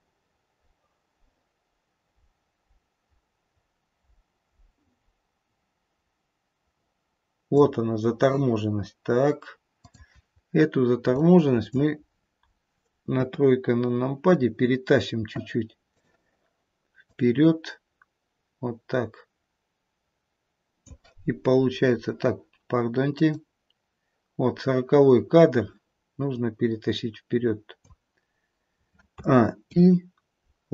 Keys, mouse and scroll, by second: 9.8 click, 11.0 click, 13.0 KP_3, 15.8 click, 17.1 click, 23.1 click, 29.1 click, 29.1 a, 29.5 i.